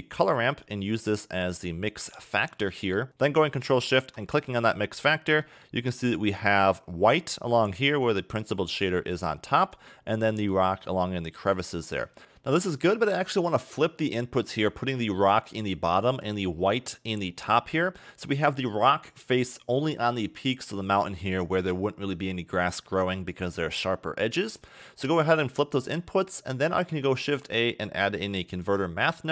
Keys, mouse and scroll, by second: 0.6 click, 3.8 ctrl+shift+click, 5.1 middle click, 6.9 scroll up 1, 8.5 click, 12.2 middle click, 13.2-13.8 scroll up 3, 13.8 middle click, 15.2 click, 24.3 scroll down 2, 24.6 middle click, 26.0-26.7 scroll up 2, 26.7 shift+a.